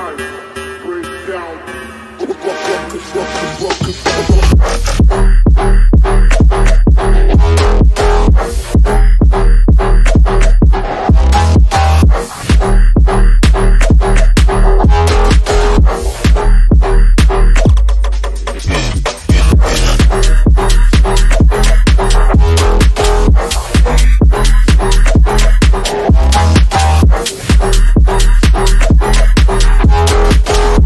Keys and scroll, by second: 0.5 F3, 5.2 F3, 6.3 ctrl+s, 18.8 F3, 19.4 F3, 19.7 Escape, 27.2 F3, 27.4 Escape.